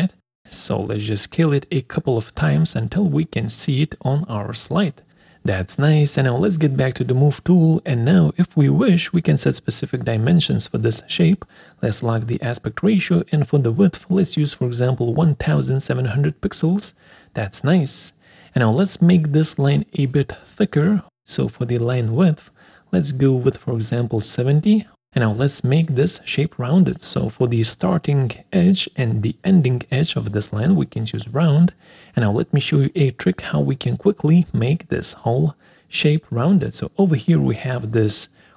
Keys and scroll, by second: 2.2 space.